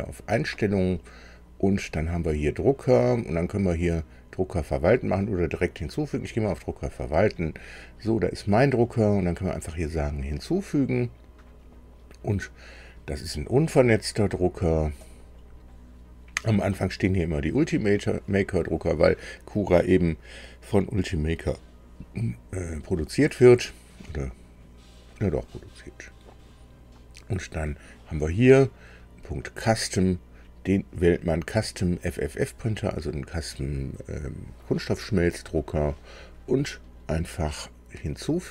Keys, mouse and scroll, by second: 6.6 click, 10.2 click, 15.0 click, 25.8-28.0 drag, 29.4 click.